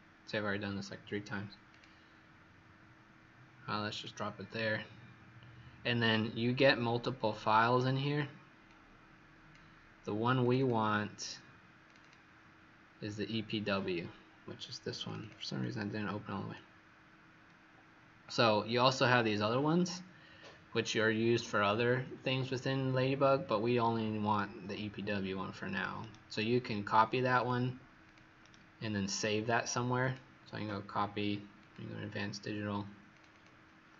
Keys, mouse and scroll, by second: 10.5 click, 11.8 click, 11.9 click, 15.0 click, 15.1 click, 25.9 right click, 28.0 click, 28.4 right click, 30.0 click, 33.2 click.